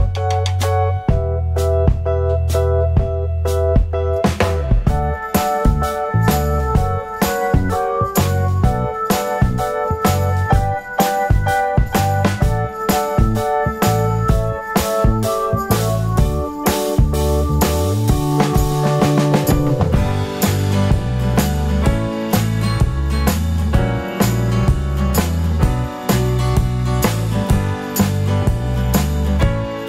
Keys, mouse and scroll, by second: 0.6 KP_0, 1.2 scroll up 1, 16.8-17.6 scroll down 1, 20.2-20.6 scroll up 1, 22.6 scroll down 1.